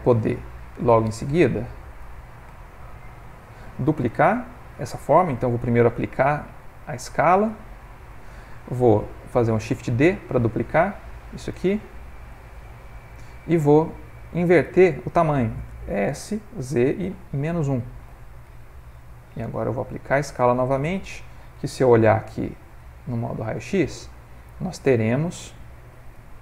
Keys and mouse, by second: 0.8 click, 1.6 ctrl+middle click, 2.0 ctrl+middle click, 2.2 g, 5.9 ctrl+a, 11.5 shift+d, 16.2 s, 19.4 ctrl+a, 21.9 z, 23.4 ctrl+middle click, 24.0 shift+middle click, 25.1 ctrl+middle click, 25.8 ctrl+middle click, 25.9 ctrl+middle click, 26.1 ctrl+middle click.